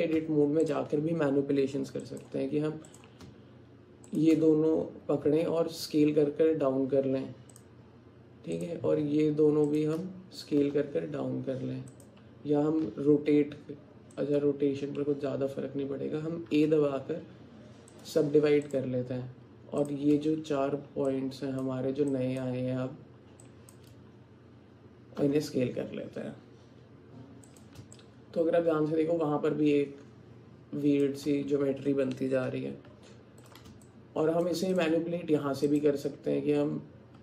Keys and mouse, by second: 0.2 Tab, 2.0 click, 2.9 click, 4.1 shift+click, 5.3 s, 9.8 shift+click, 10.6 s, 12.9 r, 16.6 a, 21.3 shift+click, 22.2 shift+click, 23.5 shift+click, 25.2 s, 28.0-31.0 alt+drag, 32.9 Tab, 33.9 alt+click, 34.8 click.